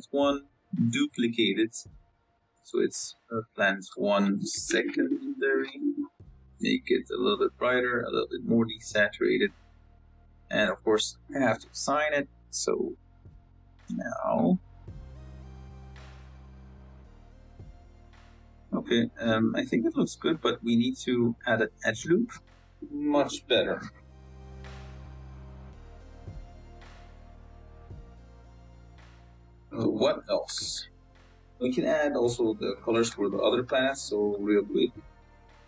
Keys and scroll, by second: 12.4 Tab, 13.5 z, 16.3 z, 17.7 z, 21.0 z, 21.7 Tab, 22.1 ctrl+r, 22.8 ctrl+r, 23.2 Tab, 25.8 z, 28.8 z, 30.1 z.